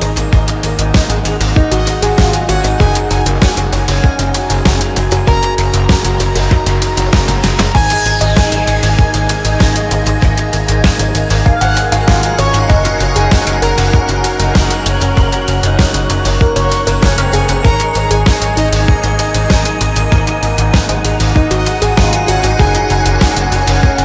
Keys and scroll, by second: 4.5 ctrl+a, 4.5 space, 10.6 space, 10.8 Escape, 17.7 space, 17.8 Escape, 18.9 space, 19.0 Escape, 19.8 space, 19.8 Escape, 21.3 shift+z, 22.6 shift+z.